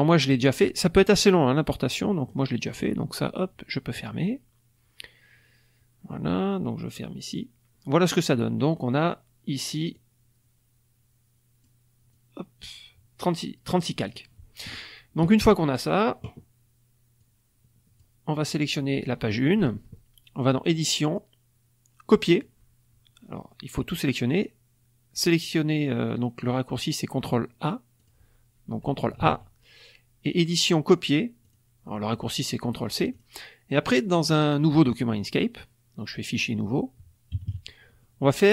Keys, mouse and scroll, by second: 1.8 click, 7.1 click, 9.9-11.8 drag, 12.1 click, 17.1-18.2 drag, 18.4 click, 20.6 click, 22.2 click, 24.2 click, 27.9 click, 29.1 ctrl+a, 30.3 click, 31.4 click, 33.1 click, 34.2 click, 35.1 click, 37.3 KP_Subtract, 38.0 middle click.